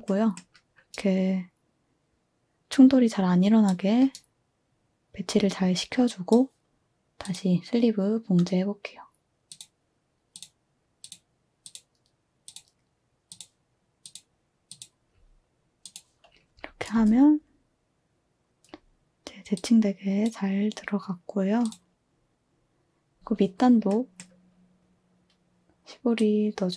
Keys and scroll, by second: 16.9 space, 22.3-22.9 typing.